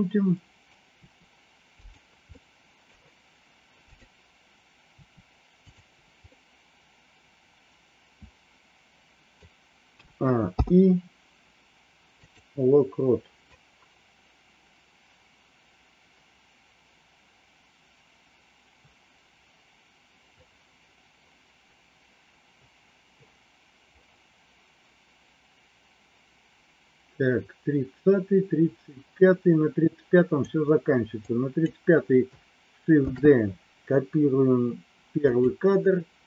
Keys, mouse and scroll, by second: 1.1 r, 2.3 middle click, 3.8 click, 4.9 r, 6.2-9.5 middle drag, 10.0 a, 10.5 i, 13.6-30.5 drag, 31.2 click, 33.0 shift+d.